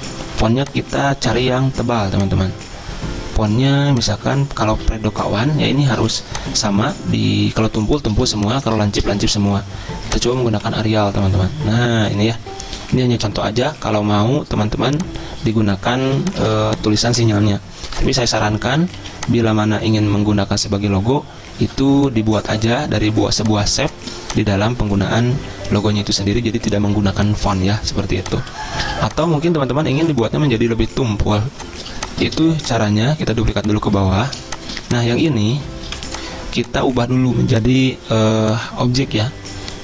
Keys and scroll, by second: 6.1 z, 8.4 v, 10.3-11.2 typing, 16.2 z, 17.2 v, 19.1 z, 21.8 v, 23.4 z, 30.6 z, 32.1 v, 34.6 z, 36.1 v.